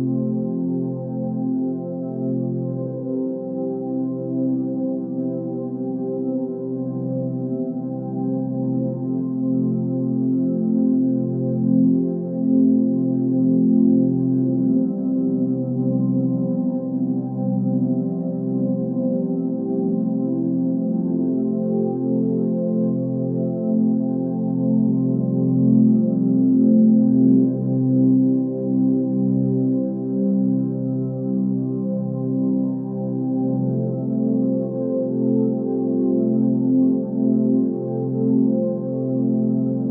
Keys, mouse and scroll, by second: 28.9 ctrl+z, 29.5 x, 35.5 x, 37.3 ctrl+z.